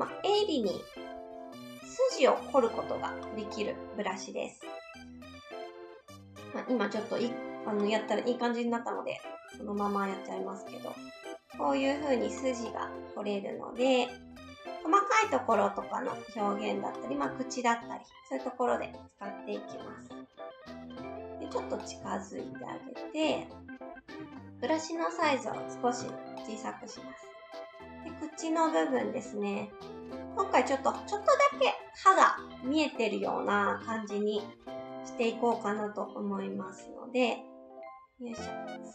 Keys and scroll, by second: 26.0 s, 36.8 s.